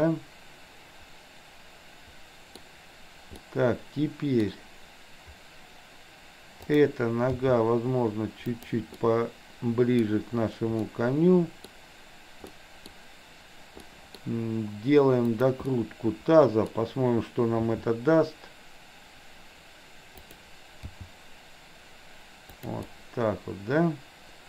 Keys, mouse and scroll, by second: 3.5-4.5 middle drag, 6.7 click, 7.5 g, 9.1-10.1 middle drag, 11.0-11.7 middle drag, 12.6-13.0 middle drag, 14.0 middle click, 14.3 drag, 15.2 click, 15.7-16.7 middle drag, 17.7 r, 20.8 g, 22.8-24.4 middle drag.